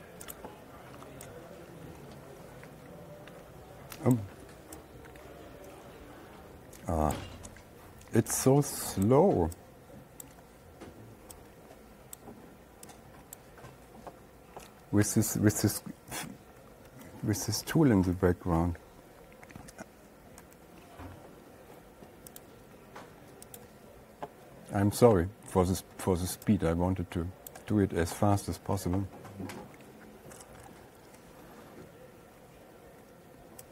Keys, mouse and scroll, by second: 0.8 click, 4.6 click, 7.6 click, 9.5 click, 10.7 click, 17.3 Down, 17.6 Down, 17.9 Left, 18.1 Left, 20.9 /, 22.9 click, 24.0 click, 24.1 click, 24.1 /, 30.4-30.8 ctrl+scroll, 31.3 ctrl+scroll, 31.7-32.1 ctrl+scroll down 3.